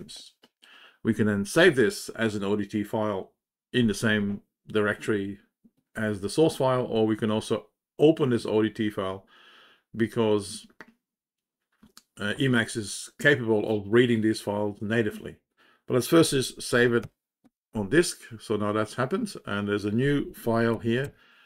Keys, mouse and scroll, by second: 20.9 ctrl+j.